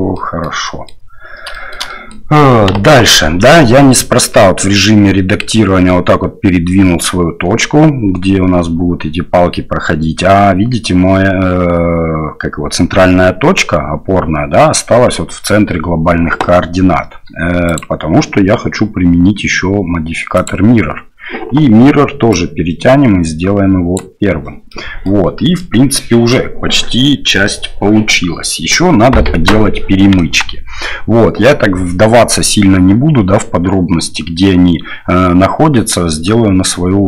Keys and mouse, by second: 0.1 click, 0.6 click, 1.5 shift+click, 1.8 click, 2.7 KP_1, 17.7-20.6 drag, 22.4-24.0 drag, 24.7 middle click, 25.6-26.3 middle drag, 30.2 KP_1, 36.6-37.0 middle drag.